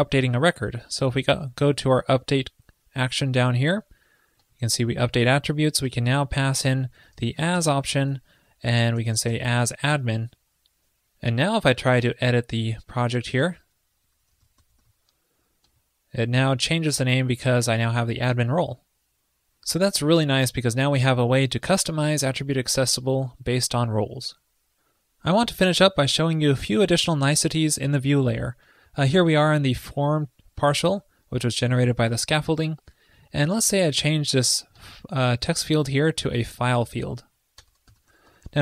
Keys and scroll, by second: 8.1 ctrl+l, 10.0 super+s.